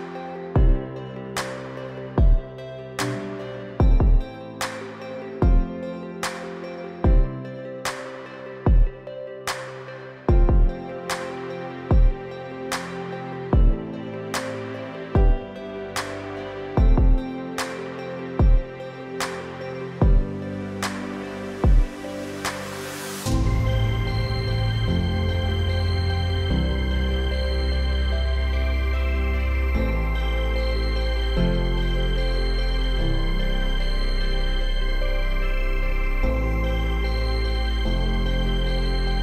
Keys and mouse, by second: 1.4 click, 3.8-5.4 drag, 7.5 shift+click, 9.1-9.6 drag, 12.6 click, 13.9 click, 16.0 click, 16.8 click, 20.8-22.1 drag, 22.9 click, 24.5-26.6 drag, 28.6-29.2 middle drag, 30.4-31.1 drag, 31.6-32.6 drag, 34.8-35.6 right drag, 36.5-38.4 right drag.